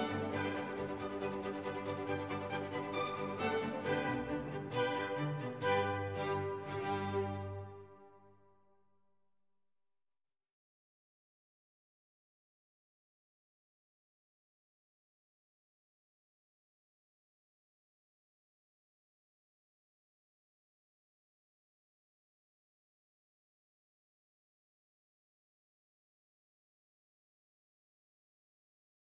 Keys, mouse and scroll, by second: 2.3 click, 3.0-14.9 typing, 16.0-22.9 typing, 25.5 click, 28.1 click.